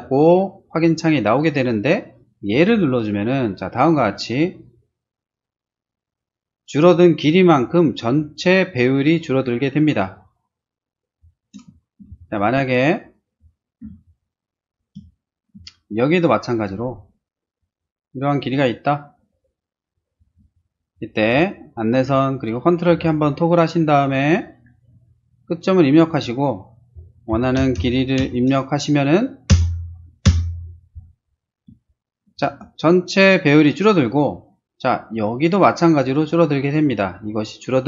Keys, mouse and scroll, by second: 2.5 click, 10.8-11.4 scroll down 2, 11.7 middle click, 12.1 s, 12.2 click, 13.0 shift+click, 13.8 p, 14.0 click, 14.7 click, 14.9 s, 15.2 middle click, 16.5 click, 17.5 click, 18.4 click, 19.2 click, 20.2 space, 21.2 t, 24.6 click, 26.0 click, 27.0-28.2 typing, 29.5 Return, 30.2 Return, 31.5 middle click, 31.8 middle click, 32.5 shift+space.